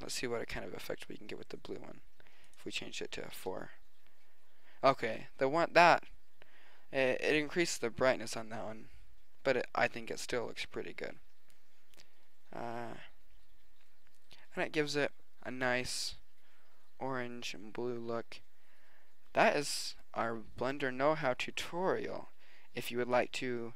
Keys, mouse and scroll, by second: 0.5 click, 2.5-4.7 drag, 13.1-15.3 middle drag, 19.5-20.9 middle drag.